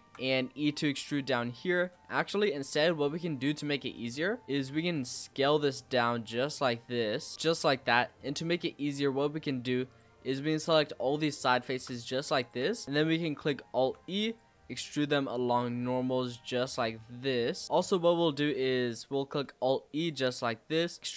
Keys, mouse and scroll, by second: 0.2 e, 2.0 scroll down 1, 2.2 click, 2.7 l, 3.9 click, 4.4-4.9 scroll up 2, 4.9 s, 8.8-9.8 middle drag, 9.8 click, 10.5 shift+click, 10.8 middle click, 11.5 shift+click, 11.9 middle click, 12.4 shift+click, 12.8 middle click, 13.1-13.7 scroll up 1, 13.7 alt+e, 16.8 scroll down 4, 17.1 middle click, 18.0-19.4 scroll up 4, 18.2 middle click, 19.4 alt+e.